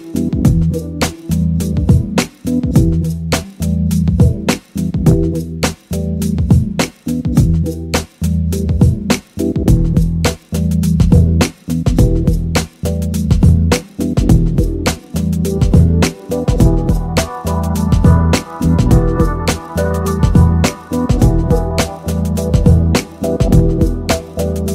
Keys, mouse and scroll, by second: 3.8 click, 5.3-6.5 middle drag, 12.3 click, 15.7 click, 16.5 right click, 20.3-21.9 right drag, 23.7-24.7 drag.